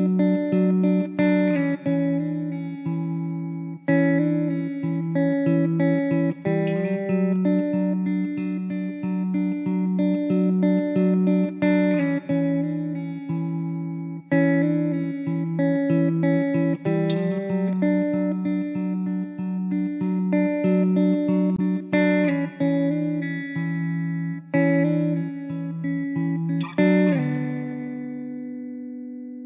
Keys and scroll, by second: 0.8 s, 2.0 `, 3.4 s, 4.1 ctrl+z, 5.0 s, 13.5 ctrl+z, 13.9 ctrl+z, 17.6 s, 22.6 s.